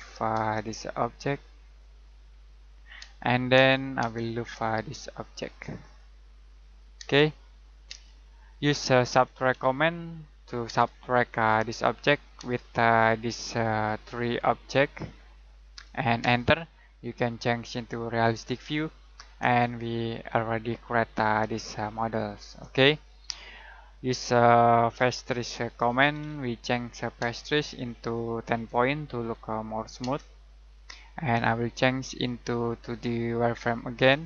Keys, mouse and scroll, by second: 1.6 click, 3.0 space, 5.2 click, 7.0 space, 9.1-9.5 typing, 10.6 space, 11.7 click, 12.3 space, 16.2 space, 17.6 click, 19.8 shift+middle click, 22.7 scroll up 1, 23.3-23.7 scroll down 1, 23.7 middle click, 24.7-27.2 typing, 28.5-30.0 typing, 32.6 click.